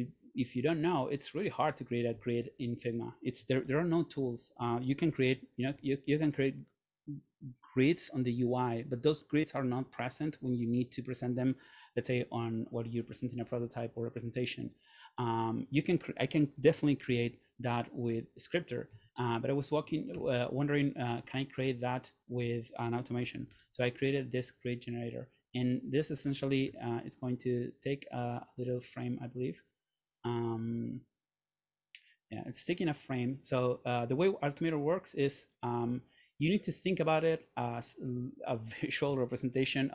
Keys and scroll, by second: 2.9 Return, 3.7 super+/, 4.7 Escape, 5.2 super+/, 5.8 Escape, 17.2 super+/, 18.8-19.9 typing, 19.9 Down, 20.2 Return, 23.1-24.1 typing, 26.8 f.